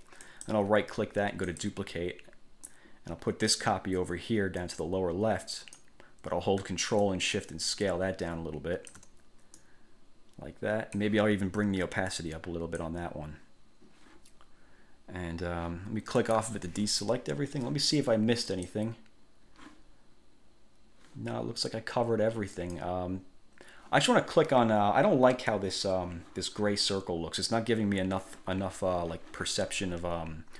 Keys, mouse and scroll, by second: 0.4 click, 1.6 click, 2.9-6.1 drag, 7.2 ctrl+shift+click, 9.7-11.3 drag, 12.3 click, 16.3 click, 18.7 click, 22.7 click.